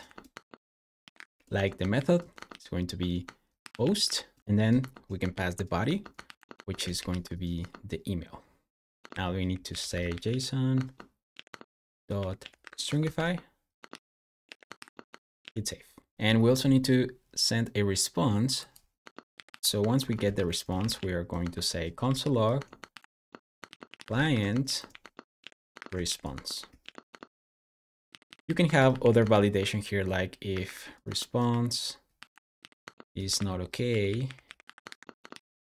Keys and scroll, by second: 0.0-10.6 typing, 11.3 Return, 11.8-15.1 typing, 15.2 super+s, 18.9 Escape, 18.9-26.4 typing, 26.6 super+s, 26.9 Escape, 27.7-35.7 typing, 30.9 Return.